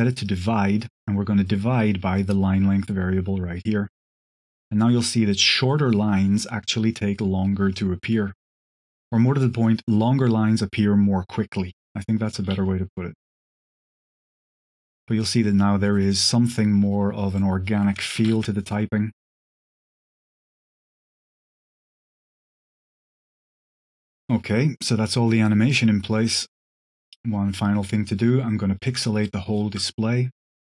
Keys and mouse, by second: 0.1 click, 2.1-3.9 drag, 12.4 space, 14.7 click, 15.3 drag, 16.2 click, 17.2-20.8 drag, 21.0 click, 21.3 click, 21.5 click, 22.0 click, 23.3 click, 24.1 space, 24.7 click, 28.4 shift+drag, 29.2 shift+drag, 30.4 click.